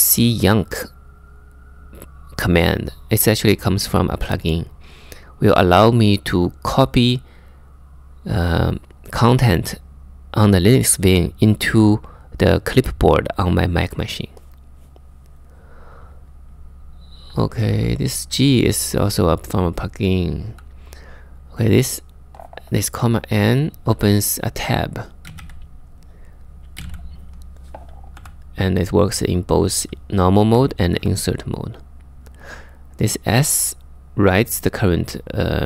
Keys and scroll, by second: 16.9-17.3 typing, 20.1 j, 24.6-27.8 typing, 30.1 k, 30.6 j, 31.9 j.